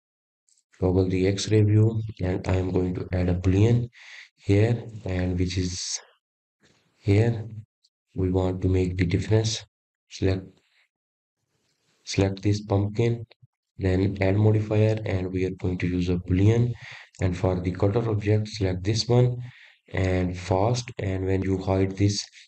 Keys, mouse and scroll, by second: 0.6-2.0 middle drag, 2.0 click, 2.9-5.4 middle drag, 5.4-9.7 drag, 13.7 click, 15.8 click, 16.7 click, 17.9-20.9 drag, 21.7 click.